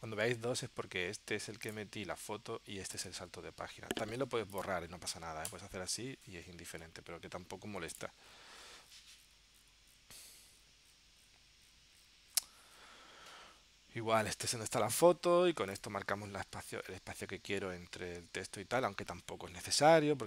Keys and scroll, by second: 6.9 super+z.